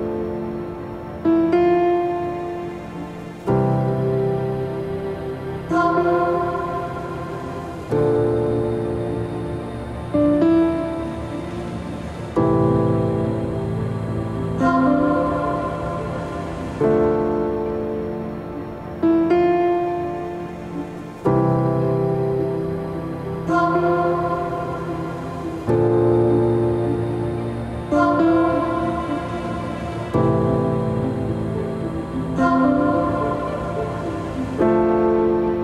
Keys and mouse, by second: 5.8-7.1 drag, 7.4-10.0 drag, 11.0 middle click, 13.3-14.7 drag, 19.3-22.4 drag.